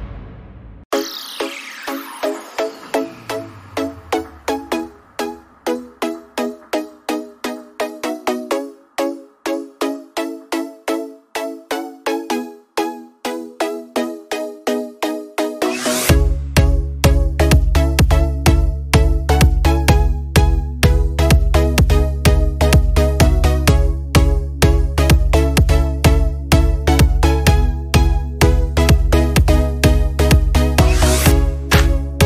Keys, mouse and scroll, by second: 5.6 scroll up 1, 5.7 alt+scroll down 1, 7.7 alt+scroll down 1, 12.3 click, 18.8 alt+scroll up 1, 20.3 scroll up 1, 26.5 alt+Num_Lock, 26.7 alt+scroll down 1.